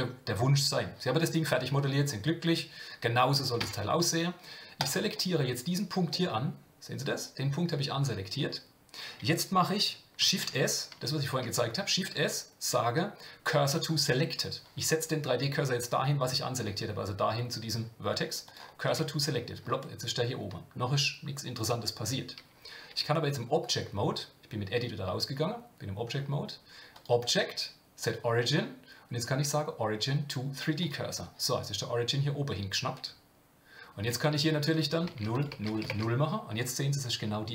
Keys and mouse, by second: 3.6 Tab, 4.8 click, 6.1-8.4 middle drag, 10.2 shift+s, 19.7-20.7 middle drag, 22.9 Tab, 26.9-30.9 drag, 34.7 click, 35.4 click, 35.8 click.